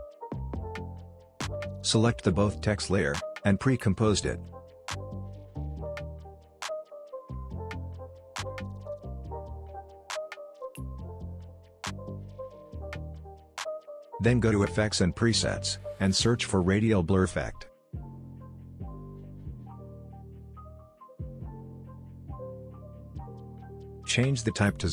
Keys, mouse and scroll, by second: 0.3 space, 1.1-1.7 click, 1.7 scroll down 1, 1.9 click, 4.8 right click, 5.8 click, 6.7-7.9 typing, 8.5 Return, 9.4 click, 11.2-11.8 scroll down 1, 11.8 scroll up 1, 12.0 click, 16.4-17.4 typing, 18.9-20.3 typing, 22.6 click.